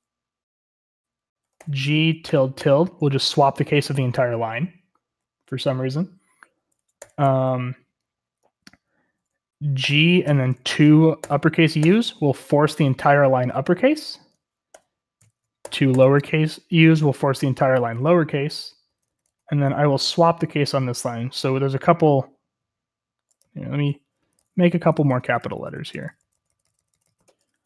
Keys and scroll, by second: 1.5-2.6 typing, 7.0 typing, 9.8 typing, 11.2-11.8 typing, 14.7-15.9 typing, 18.3-19.7 typing, 23.6-27.6 typing.